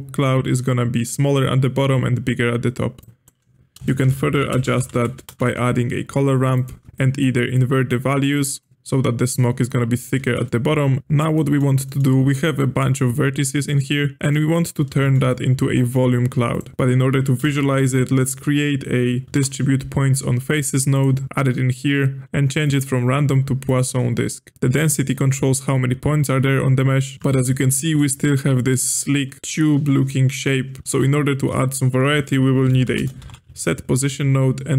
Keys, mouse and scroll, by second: 3.0-3.8 drag, 3.8 space, 4.9 r, 6.9 ctrl+z, 6.9-8.7 drag, 8.7-11.0 shift+middle drag, 11.0-11.3 scroll down 1, 11.3-12.0 middle drag, 12.0-13.6 scroll up 1, 13.6 click, 14.3-14.7 middle drag, 14.7 scroll up 1, 15.0-16.5 shift+middle drag, 16.5 click, 17.4 space, 21.2-22.6 scroll up 4, 22.6-24.5 drag, 24.5 ctrl+z, 24.7-27.1 drag, 27.1-29.4 shift+middle drag, 32.1 space.